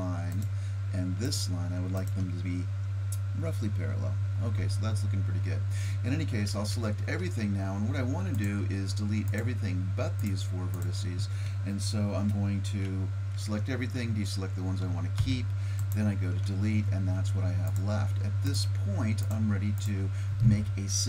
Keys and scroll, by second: 6.5 a, 6.8 a, 15.2 Delete.